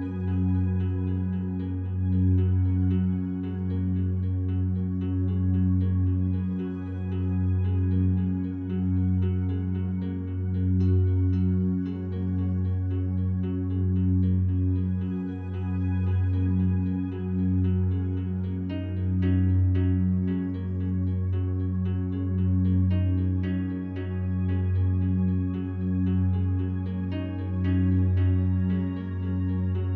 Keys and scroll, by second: 25.5 Delete.